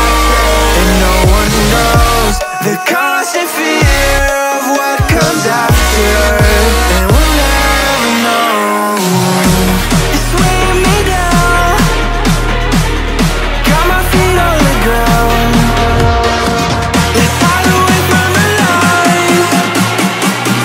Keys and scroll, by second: 5.9 ctrl+z.